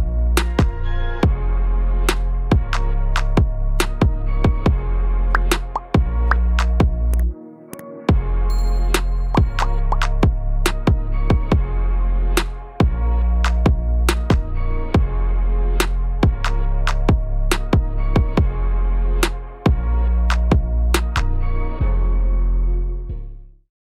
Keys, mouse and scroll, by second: 0.8 ctrl+KP_1, 1.5-1.9 scroll up 2, 1.9 shift+middle click, 3.0 alt+z, 3.5 click, 6.7 ctrl+l, 8.7 scroll down 1, 9.0 middle click, 9.7-10.0 scroll down 1, 10.2 click, 11.1 scroll up 1, 12.2 ctrl+s, 13.0 middle click, 15.2 scroll down 3, 15.5 middle click.